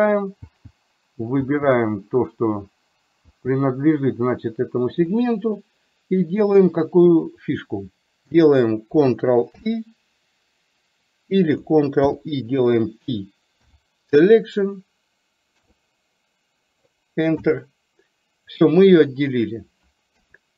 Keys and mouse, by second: 9.6 ctrl+i, 12.2 ctrl+i, 13.8 p, 20.2 KP_3.